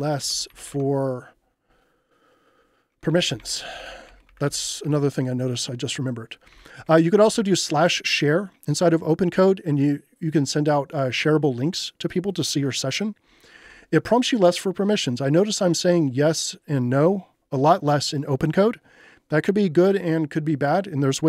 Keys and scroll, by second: 0.0-1.2 typing, 2.8-5.0 typing, 6.2-7.8 typing, 13.6 j.